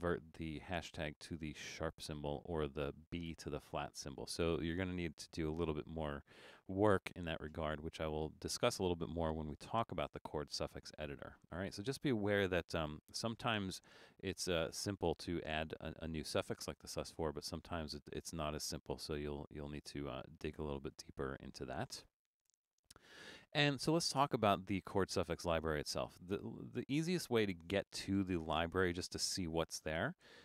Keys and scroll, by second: 22.5 BackSpace.